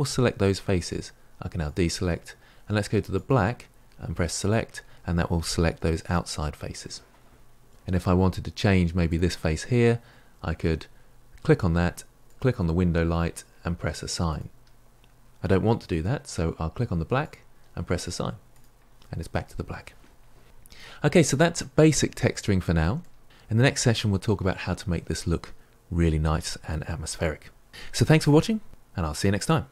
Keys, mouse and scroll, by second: 4.4-9.1 drag, 12.2 click, 14.3-17.2 drag, 18.5-20.4 drag, 20.4-21.2 scroll down 6, 21.2 shift+middle click, 21.7-22.5 scroll down 2, 22.5-29.7 shift+middle drag.